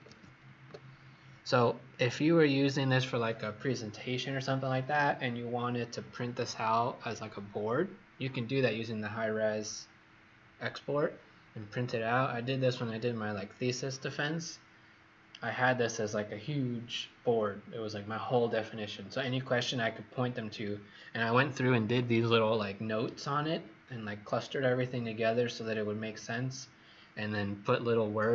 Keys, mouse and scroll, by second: 0.0-0.3 typing, 1.8 click.